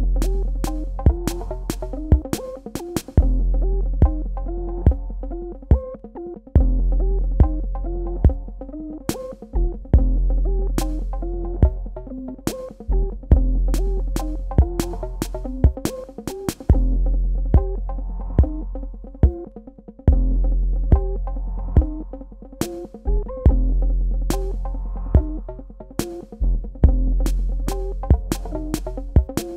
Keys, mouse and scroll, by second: 1.1 z, 3.1 click, 9.9 KP_1, 10.0 KP_6, 10.2 KP_4, 10.6 KP_Enter, 12.6 click, 19.9 click, 25.0 click, 27.0 KP_Add.